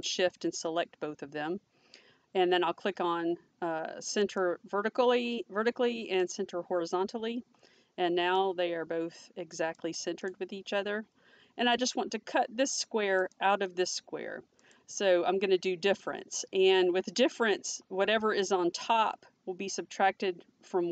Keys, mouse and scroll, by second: 0.0 click, 4.3 click, 6.2 click, 8.4 click, 10.2 click.